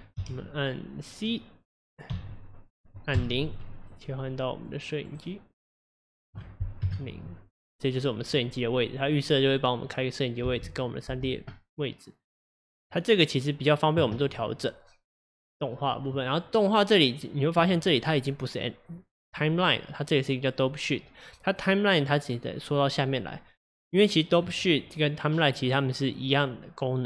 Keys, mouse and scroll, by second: 0.1 t, 6.3 click, 6.8 KP_0, 10.4 space, 11.1 space, 12.2-27.0 drag.